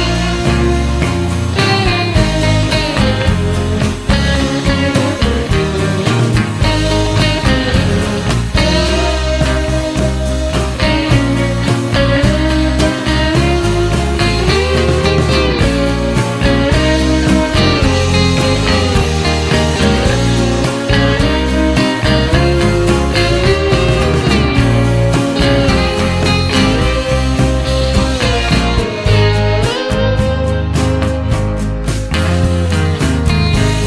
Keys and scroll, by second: 22.9 Return.